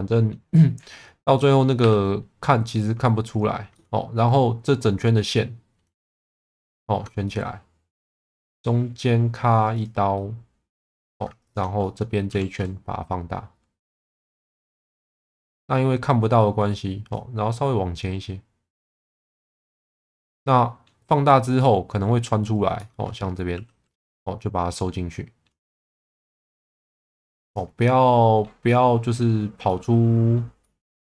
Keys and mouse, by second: 1.4 middle click, 1.8 2, 3.7 middle click, 7.2-8.3 middle drag, 10.1 middle click, 11.0 2, 11.9 middle click, 12.3 s, 14.0 click, 14.3-16.4 middle drag, 17.2 click, 20.0 middle click, 21.6 middle click, 22.8 shift+middle click, 23.5 1, 23.9 click, 24.2-25.4 middle drag, 26.3 click, 27.8 middle click, 28.6 middle click, 29.7 middle click, 30.6 middle click.